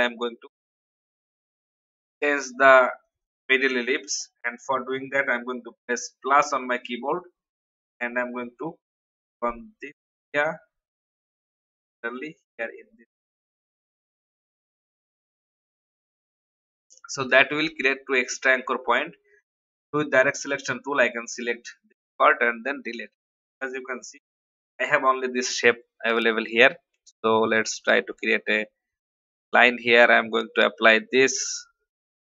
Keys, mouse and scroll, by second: 17.6-18.9 typing, 19.7-22.1 drag, 22.2 Delete, 23.5 click, 28.1 shift+click, 29.5 shift+v, 30.3-32.2 drag.